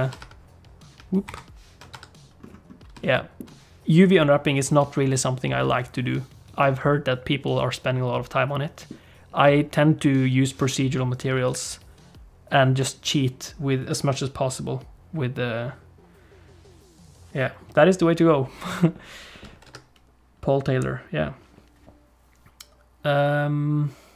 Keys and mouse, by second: 0.2 Tab, 1.2 shift+F10, 1.9 Tab, 3.1 shift+click, 6.6-8.9 middle drag, 19.7 Tab.